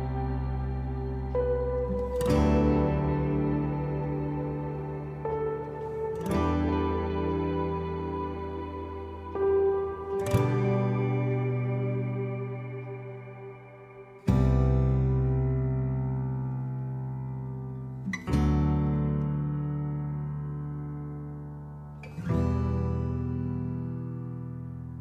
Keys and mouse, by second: 0.5 middle click, 1.7 middle click, 3.1-4.4 drag, 4.5 middle click, 5.8 shift+middle click, 6.6-8.0 drag, 9.1 ctrl+2, 11.6 click, 12.4-13.5 drag, 13.8 middle click, 16.1-17.4 drag, 17.6-19.3 middle drag, 19.5 shift+middle click, 20.1-21.1 middle drag, 21.6 shift+middle click, 22.5 shift+middle click, 24.2 x.